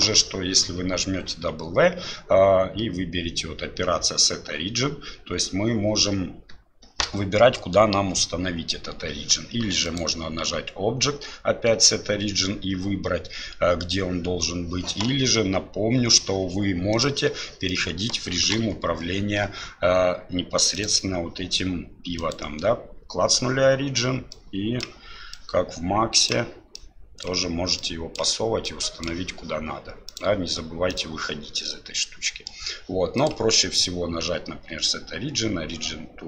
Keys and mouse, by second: 9.9-14.2 drag, 17.7 middle click, 18.5 KP_1, 20.8-23.6 drag, 24.3 click, 25.3-26.3 drag, 26.8 click, 27.8 click, 28.7 click, 30.2-31.3 drag, 31.6-32.5 middle drag, 33.3-36.2 drag.